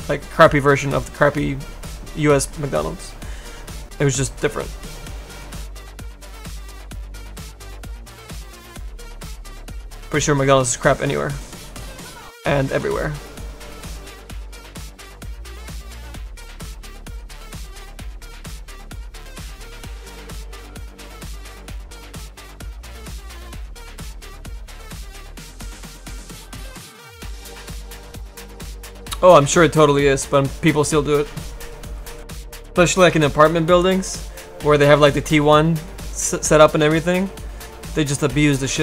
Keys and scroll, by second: 0.7 s, 8.2 s, 9.3 s, 10.6 s.